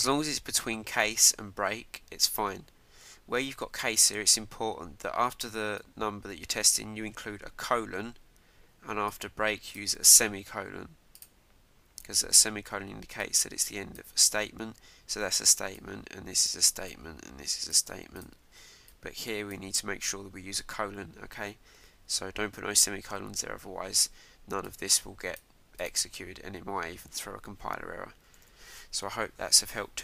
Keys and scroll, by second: 28.4 super+s.